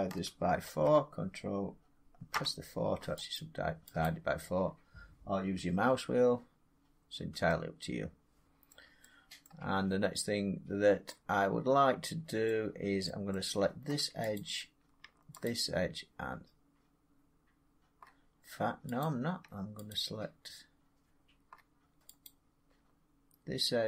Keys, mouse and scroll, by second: 0.5 ctrl+r, 2.0 scroll down 4, 2.2 4, 3.2 click, 3.9 click, 4.9-5.5 scroll, 6.9 scroll, 7.4 scroll up 3, 8.5 middle click, 9.3 middle click, 12.3-13.2 middle drag, 14.2 click, 15.3 shift+click, 18.9 click, 19.8 shift+click, 22.1 click.